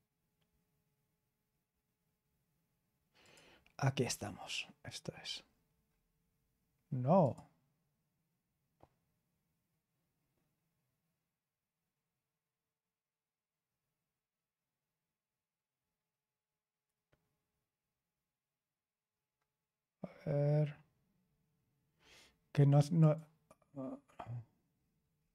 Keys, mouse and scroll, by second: 2.2-3.2 scroll down 1, 3.2 click, 5.4-7.2 scroll down 1, 7.2 click, 17.8-18.7 scroll down 1, 18.7-20.1 scroll down 1, 20.1-22.0 scroll down 1, 22.0-22.9 scroll down 1, 22.9 click, 24.7-25.3 scroll down 3.